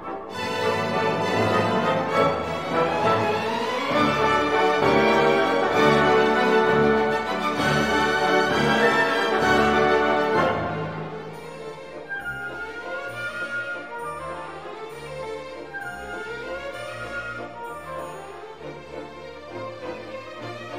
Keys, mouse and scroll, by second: 2.7 2, 4.2 scroll up 2, 5.1-5.9 scroll up 2, 7.0-7.5 scroll down 2, 8.7-9.6 drag, 10.3-11.1 scroll down 2, 11.6-12.9 scroll up 2, 14.1-14.9 scroll down 2, 15.7-16.3 scroll up 2, 16.7 scroll down 2, 20.2-20.7 scroll down 2.